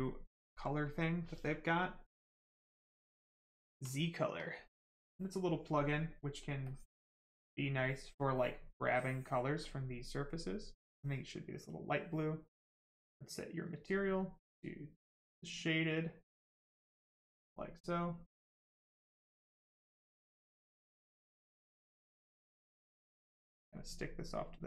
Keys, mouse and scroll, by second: 6.6 click, 8.9 click, 11.2 right click, 12.7 click, 15.2 click, 16.0 right click, 16.9 alt+right click, 18.3 click, 20.7 click.